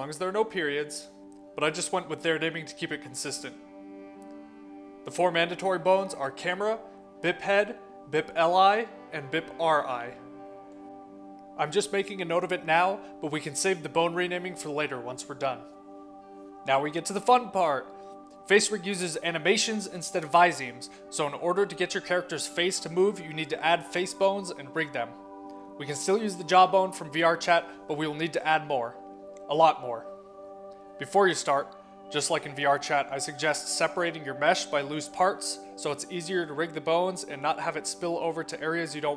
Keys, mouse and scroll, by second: 2.1 click, 7.6-8.6 drag, 8.9 click, 10.5 click, 12.3 middle click, 14.1-15.1 middle drag, 15.4 middle click, 18.7 click, 19.5 click, 22.1 middle click, 31.0 scroll up 1, 31.7 click, 33.5 click, 34.0 click, 34.7 click, 35.6 click, 38.9 click.